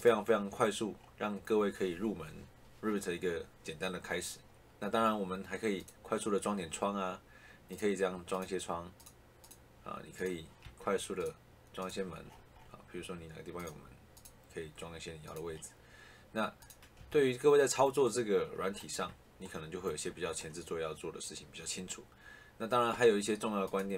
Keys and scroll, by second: 10.5 Escape, 16.9 Escape.